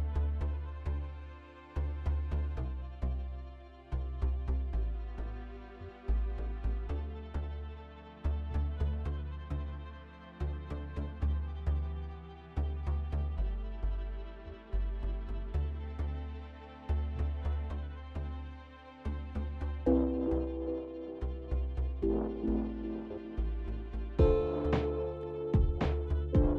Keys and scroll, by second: 3.7 ctrl+v, 4.5 ctrl+a, 6.6-7.5 typing, 25.7 ctrl+s, 26.0 ctrl+s.